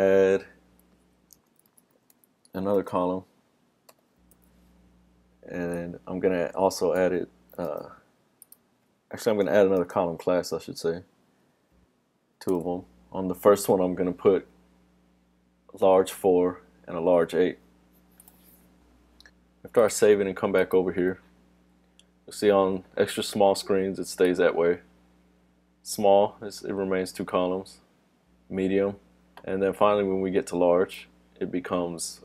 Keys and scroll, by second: 7.7 super+c, 10.0 super+v, 18.8 super+s.